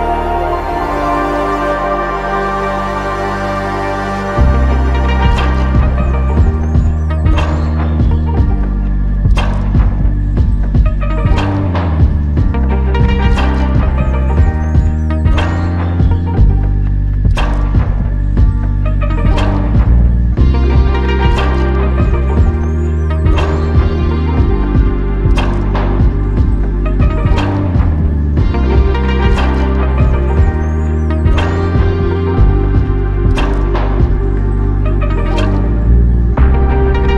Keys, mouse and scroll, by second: 0.3 ctrl+click, 0.3 ctrl+click, 3.6 ctrl+click, 4.3 ctrl+click, 27.0 ctrl+click, 30.7 ctrl+click, 32.6 ctrl+click, 35.2 ctrl+click, 36.3 ctrl+click.